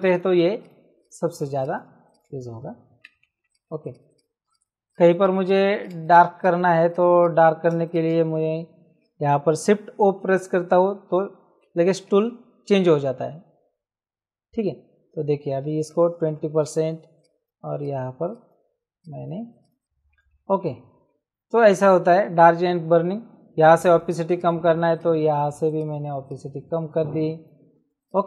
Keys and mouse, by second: 1.8 space, 2.0 click, 3.5 click, 5.9 space, 6.0 click, 6.4 click, 7.7 space, 7.8 click, 10.0 shift+o, 15.9 KP_2, 17.2 click, 19.8 space, 23.7 click, 28.0 click.